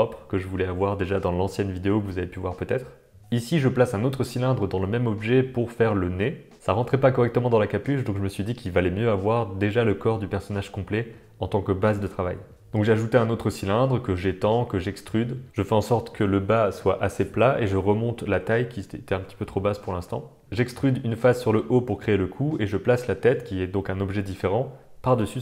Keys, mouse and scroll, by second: 0.3 click, 0.4 Tab, 0.6 shift+a, 3.5 g, 3.8 s, 4.1 middle click, 4.3 click, 4.5 middle click, 4.7 e, 5.8 r, 6.1 r, 6.6 middle click, 6.6 g, 7.9 middle click, 8.3 click, 8.4 g, 9.0 Tab, 9.1 Tab, 9.2 click, 9.3 Tab, 9.3 click, 9.5-13.5 typing, 10.1 middle click, 10.5 Tab, 12.5 middle click, 14.4 middle click, 14.7 r, 15.2 r, 16.5 g, 17.2 click, 18.0 shift+click, 18.3 g, 18.9 middle click, 19.0 Tab, 20.0 shift+middle click, 20.2 click, 20.4 Tab, 20.4 g, 21.1 e, 21.4 s, 21.4 g, 22.1 middle click, 22.8-25.4 typing, 25.0 middle click.